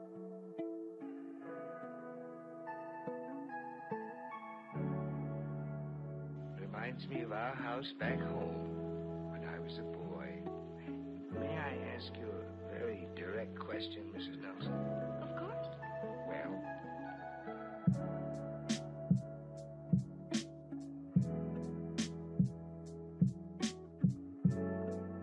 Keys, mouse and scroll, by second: 1.3 shift+d, 5.0 ctrl+z, 6.9 g, 11.1 ctrl+z, 11.8 click, 13.0 ctrl+z, 13.6 ctrl+z, 14.4 ctrl+z, 15.6-18.3 drag, 19.1 click, 20.0-21.4 drag, 22.1 click, 23.6 scroll up 3, 24.4 scroll up 1, 25.0 scroll down 1.